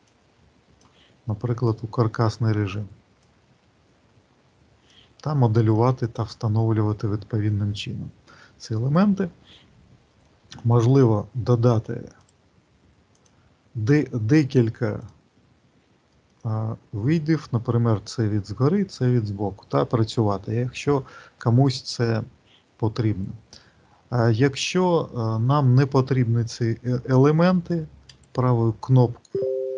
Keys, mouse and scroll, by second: 0.0 click, 1.6 click, 3.1 click, 5.5 middle click, 5.8 click, 10.5 right click, 15.0 click, 16.0 alt+middle click, 28.0 right click.